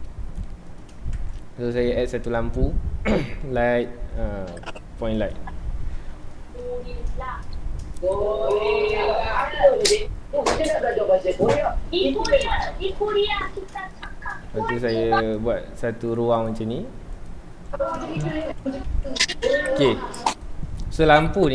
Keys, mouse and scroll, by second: 0.8 x, 6.5-6.9 scroll up 1, 6.9 shift+middle click, 7.2 ctrl+s, 10.9 shift+a, 11.3-11.6 scroll down 1, 11.6 s, 12.5 click, 13.1 Tab, 13.4 2, 13.5 click, 14.4 e, 15.3 click, 15.4 Tab, 16.5 click, 16.5 g, 17.3 click, 17.7 z, 18.2 shift+middle click, 18.5 alt+a, 19.8 Escape, 20.4 click, 20.7 scroll up 1.